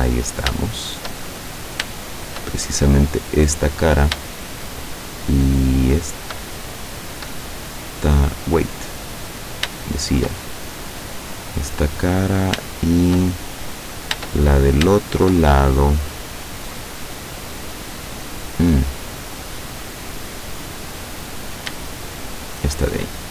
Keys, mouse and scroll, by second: 0.1-0.6 scroll up 2, 0.7 shift+middle click, 1.3-1.8 shift+scroll up 3, 2.1 shift+middle click, 3.0 right click, 3.6 middle click, 4.4 shift+middle click, 5.9 shift+right click, 6.6 shift+middle click, 7.5 middle click, 8.1 scroll down 2, 8.5-9.5 middle drag, 9.8 shift+middle click, 10.5 shift+middle click, 11.8 middle click, 12.8 shift+middle click, 13.3 shift+middle click, 14.5-14.9 shift+scroll up 3, 15.0-16.9 shift+middle drag, 17.1-19.5 middle drag, 19.5-21.7 middle drag, 22.2 shift+right click.